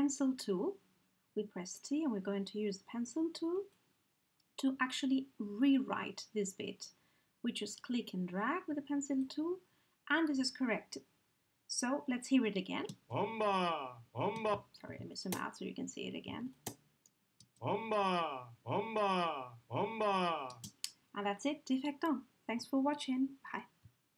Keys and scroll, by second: 12.9 space, 14.3 space, 14.9 ctrl+space, 17.4 ctrl+alt+space.